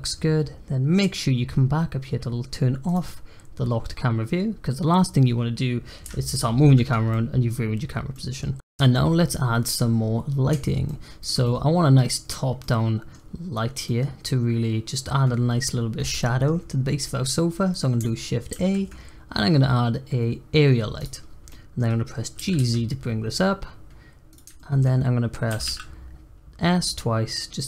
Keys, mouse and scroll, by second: 2.8 click, 6.0 n, 6.3-6.8 middle drag, 6.8 scroll down 4, 7.1-7.7 middle drag, 7.7-8.1 scroll up 1, 8.1-8.5 middle drag, 8.5 scroll up 1, 10.8-11.7 shift+middle drag, 11.7-12.5 scroll down 1, 12.5-14.1 middle drag, 14.1-14.8 scroll up 2, 16.1 middle click, 16.5-16.9 scroll down 1, 16.9-18.4 scroll up 2, 18.4 shift+a, 21.2 scroll down 2, 21.4 middle click, 22.3 g, 24.5 shift+middle click, 25.4 s.